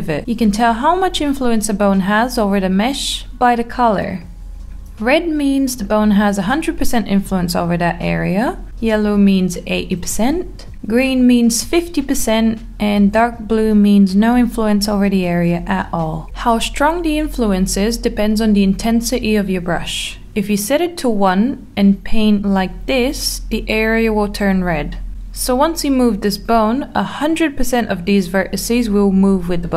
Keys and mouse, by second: 4.5-5.6 middle drag, 6.3 click, 7.0 click, 7.7-9.4 middle drag, 10.1 click, 11.3 click, 11.6 click, 13.6 click, 14.0 click, 15.0-16.3 drag, 16.5 middle click, 18.9 click, 19.5 middle click, 20.1 click, 21.2 middle click, 29.4-29.7 drag.